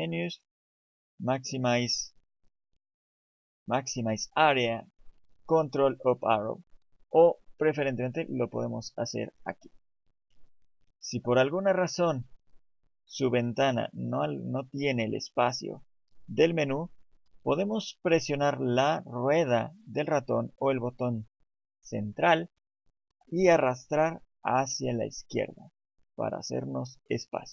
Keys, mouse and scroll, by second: 11.4 click, 15.2 middle click, 19.3 middle click.